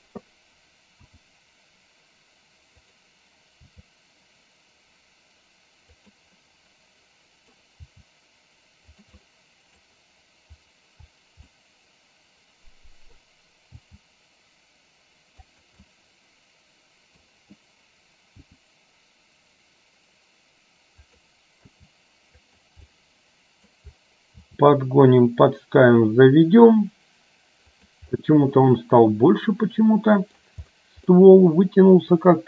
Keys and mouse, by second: 1.2 r, 3.8 g, 7.9 g, 9.4 middle click, 11.5-13.2 middle drag, 13.9 g, 16.0-17.3 middle drag, 18.5 r, 21.8 g, 22.9 middle click, 24.4 g, 28.7-30.5 middle drag, 31.2-32.4 middle drag.